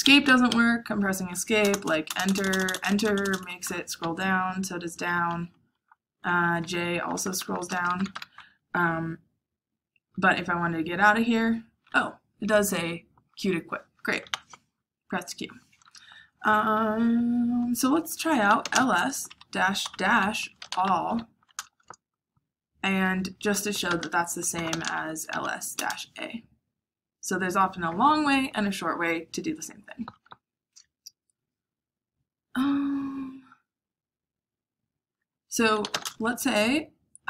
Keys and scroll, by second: 0.2 Escape, 0.4-1.8 Escape, 1.6 Return, 1.8 Return, 2.0 Return, 2.2 Return, 2.3 Return, 3.3 Return, 4.0 Down, 4.6 Down, 5.4-8.0 typing, 10.1 typing, 14.2 q, 18.2-21.0 typing, 21.5 Return, 23.5-25.7 typing, 35.5-36.3 typing.